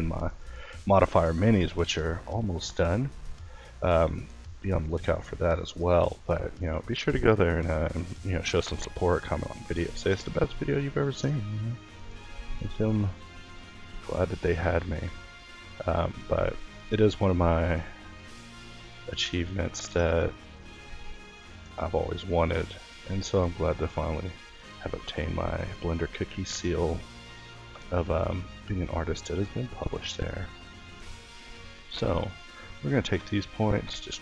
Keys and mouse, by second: 0.0 click, 2.8 s, 5.4 middle click, 5.6 Tab, 8.6 Tab, 9.0 a, 9.9 click, 10.8 ctrl+i, 11.6 x, 12.3 click, 12.4 Tab, 14.0 Tab, 14.7 a, 15.1 a, 21.2 ctrl+r, 22.3 x, 23.2 Tab, 24.9 Tab, 25.6-27.9 typing, 28.9-33.6 middle drag, 33.9 Tab.